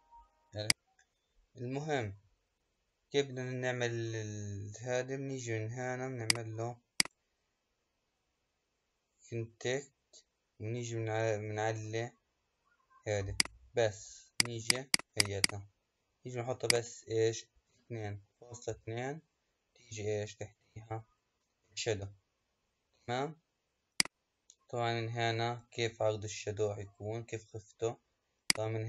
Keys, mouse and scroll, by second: 6.2 click, 7.0 click, 13.2-19.7 drag, 23.8-26.9 drag, 28.3-28.8 drag.